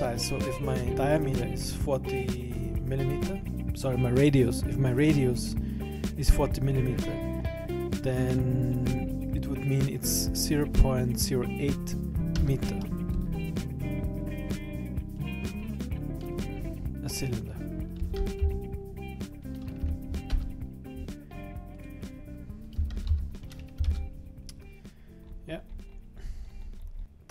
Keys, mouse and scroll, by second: 15.2 click, 21.7 click, 25.3-27.0 scroll up 19, 27.0 Escape, 27.0 right click, 27.0-27.3 scroll down 2.